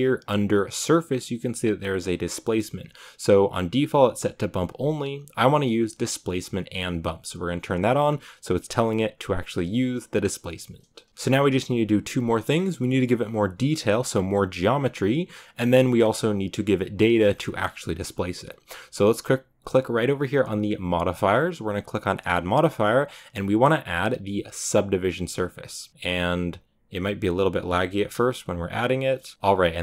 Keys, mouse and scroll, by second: 6.4 drag, 11.1-29.8 shift+middle drag.